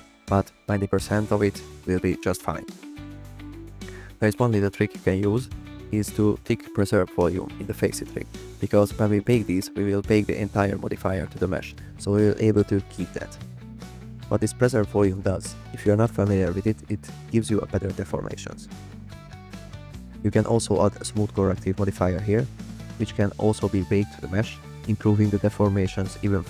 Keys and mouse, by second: 0.7-4.2 drag, 5.2 click, 5.2 middle click, 5.5 click, 5.6 click, 5.6 middle click, 8.7 click, 22.3 click, 25.3 click.